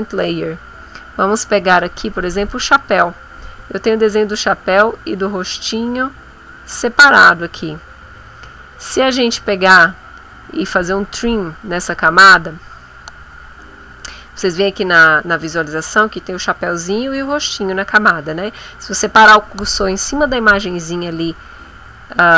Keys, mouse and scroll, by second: 1.3 click, 2.3 click, 2.7 click, 3.6 click, 4.1 click, 4.9 click, 5.4 click, 6.8 click.